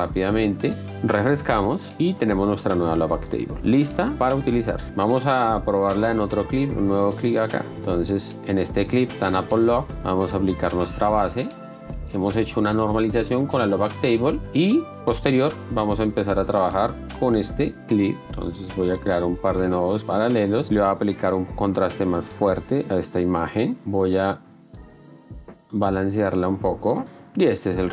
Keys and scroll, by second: 0.9 Return, 0.9 BackSpace, 15.5 s, 17.8 z, 18.2 F1, 18.8 s, 27.4 ctrl+d.